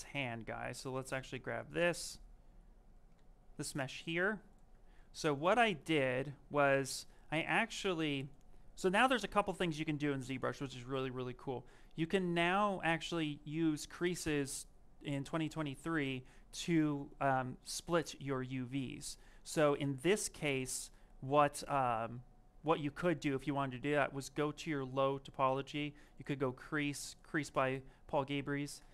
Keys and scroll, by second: 3.0 shift+f.